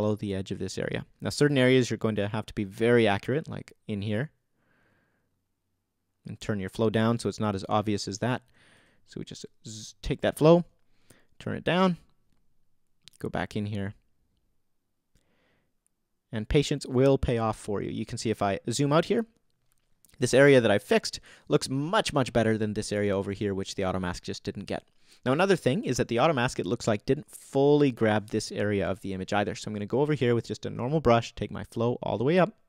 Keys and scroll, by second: 9.7 super+z.